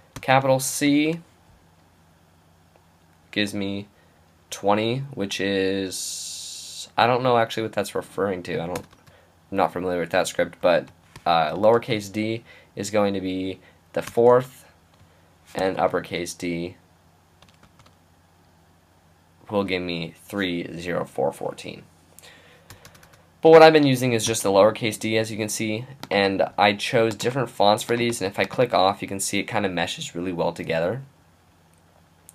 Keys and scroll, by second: 0.2 shift+c, 0.9 shift+', 11.2-11.7 typing, 15.3-16.1 typing, 17.6 shift+', 24.3 d, 25.1 d.